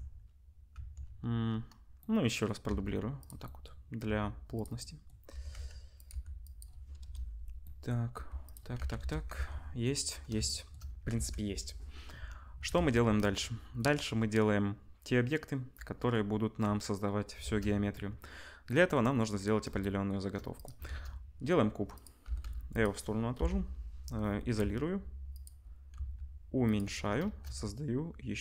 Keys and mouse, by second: 0.7 Tab, 2.6 shift+d, 4.0 s, 5.3 r, 6.1 g, 7.0 KP_0, 7.6-12.0 drag, 8.1 g, 8.8 ctrl+s, 8.9 KP_0, 9.3 Tab, 11.1 ctrl+s, 12.7 ctrl+s, 17.4 shift+a, 20.3-27.1 drag, 20.5 middle click, 20.5 right click, 20.8 shift+a, 22.2 g, 23.3 /, 24.6 s, 25.9 s, 27.2 shift+a.